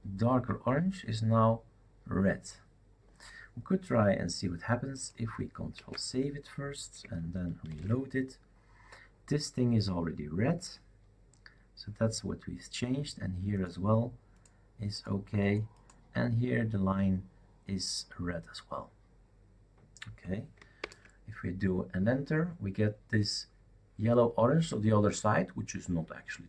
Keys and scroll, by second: 5.7 ctrl+s, 7.7 shift+super+r, 20.8 super+Return.